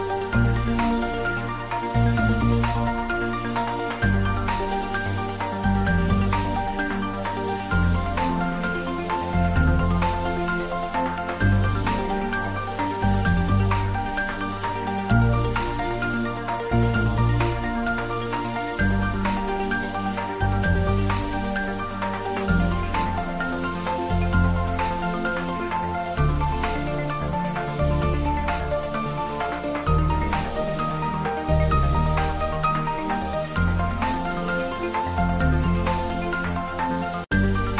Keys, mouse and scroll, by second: 0.4 s, 1.6 click, 1.7 Tab, 1.9 middle click, 3.5 Tab, 4.1 click, 6.7 Tab, 7.1 middle click, 8.2 ctrl+3, 8.5 Tab, 8.8 ctrl+middle click, 9.4 ctrl+r, 9.6 click, 11.1 ctrl+r, 11.4 click, 12.5 ctrl+r, 13.0 click, 15.4 ctrl+r, 15.6 click, 16.7 ctrl+middle click, 17.4 ctrl+e, 17.9 click, 18.3 ctrl+r, 19.1 click, 20.3 ctrl+r, 20.5-21.8 drag, 21.8 Tab, 22.6 middle click, 23.6 Tab, 24.0 ctrl+e, 24.5 click, 25.1 ctrl+e, 25.8 click, 26.5 ctrl+r, 27.0 click, 27.5 ctrl+z, 28.5 click, 29.2 Tab, 29.6 middle click, 30.1 Tab, 30.6 ctrl+r, 30.8 click, 31.5 Tab, 31.8 ctrl+middle click, 32.8 right click, 33.1 click, 33.4-35.0 ctrl+middle drag, 35.3 ctrl+middle click, 35.7 middle drag, 35.7 click.